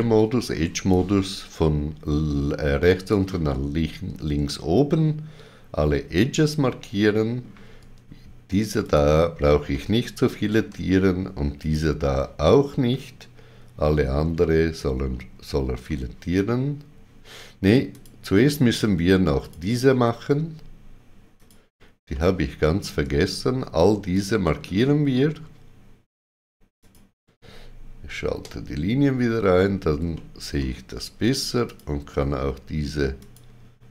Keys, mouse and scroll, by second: 0.9 click, 4.4 shift+middle click, 8.8 ctrl+click, 9.7 middle click, 11.6 ctrl+click, 12.9 middle click, 17.9 ctrl+click, 17.9 middle click, 19.4 click, 21.3 shift+click, 22.1 middle click, 24.1 shift+click, 28.3 shift+w, 31.6 shift+click, 33.1 shift+click.